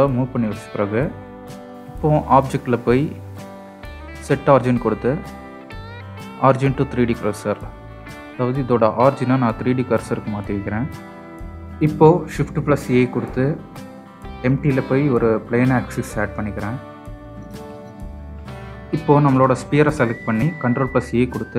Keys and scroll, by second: 11.5 shift+a, 20.7 ctrl+a.